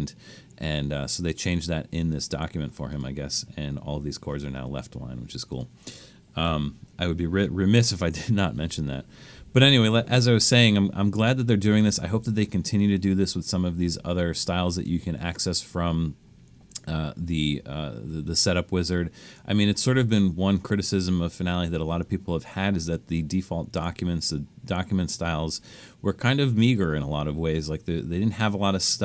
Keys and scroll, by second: 7.2 super+-, 9.6 super+-.